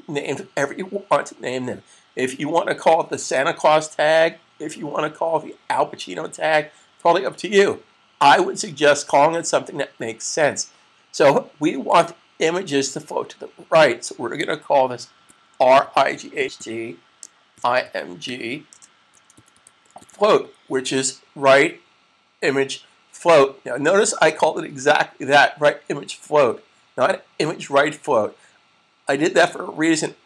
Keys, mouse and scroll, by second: 15.3-19.7 typing.